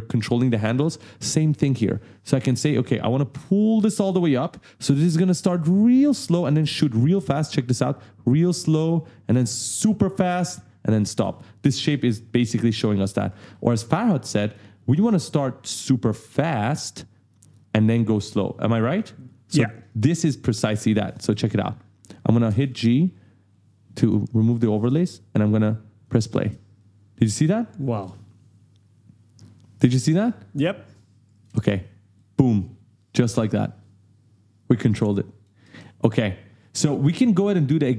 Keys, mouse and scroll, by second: 2.8 click, 5.6 click, 6.6 space, 8.3 right click, 9.4 right click, 11.0 space, 12.1 click, 13.4 ctrl+z, 14.0 right click, 15.6 click, 19.9 click, 20.8 right click, 22.5 click, 22.7 g, 23.5 click, 24.4 right click, 25.6 click, 26.3 space, 26.8 right click, 30.9 click, 31.5 space, 32.1 right click, 35.6 space, 36.1 click.